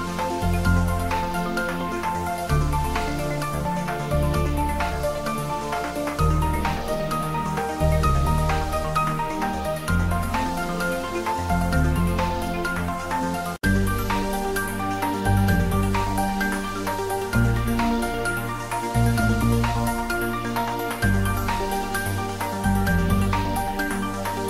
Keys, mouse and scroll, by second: 0.3 ctrl+middle click, 0.9-1.8 typing, 2.8 click, 3.1-4.8 ctrl+middle drag, 4.8 click, 5.2 ctrl+middle click, 5.3-7.6 typing, 8.4 click, 9.5 ctrl+middle click, 10.0-11.9 shift+middle drag, 12.5-13.4 typing, 13.4 click, 13.7 middle click, 14.3 Tab, 15.4 middle click, 16.5 click, 16.8 middle click, 17.1 3, 17.2 click, 17.4 middle click, 18.1 i, 20.1 click, 21.3 g, 22.4 click, 22.8 e, 24.4 click.